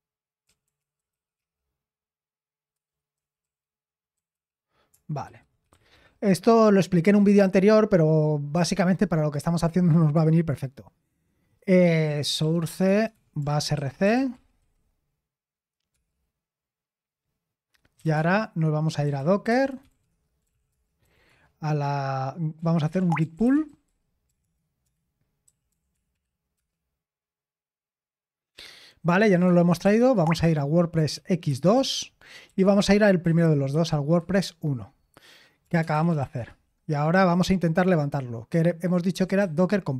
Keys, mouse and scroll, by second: 0.0-6.4 typing, 9.8 Return, 11.8-15.9 typing, 17.7-26.5 typing, 29.0-34.2 typing, 31.7 Return, 35.4-36.7 typing, 39.1 typing.